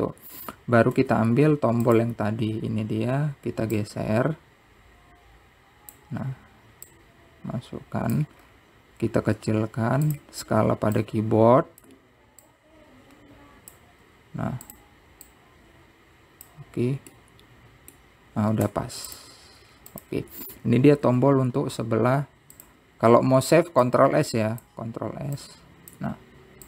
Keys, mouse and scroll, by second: 0.6 `, 1.6-2.2 scroll down 6, 2.2 Tab, 3.1 click, 3.8 scroll down 1, 3.9-4.5 scroll up 1, 5.0 click, 8.1 click, 9.6 scroll up 5, 10.5 s, 12.2 click, 13.7-15.2 drag, 15.2 s, 16.5 click, 18.3-19.9 middle drag, 20.8 scroll down 4, 21.1 click, 22.5 ctrl+s, 25.1-26.6 drag.